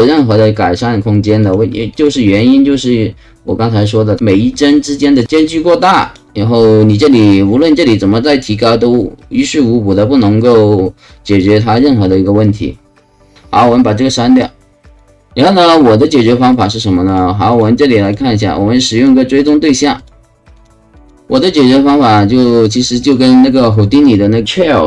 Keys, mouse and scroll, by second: 1.4 click, 1.9 click, 5.2 click, 6.0 click, 6.9 click, 14.8 click, 15.1 ], 16.5 click, 17.1 click, 17.5 click, 18.0 click, 18.9 click, 19.4 click, 19.9 click, 20.5 click, 20.9 click, 22.1 click, 23.0 click.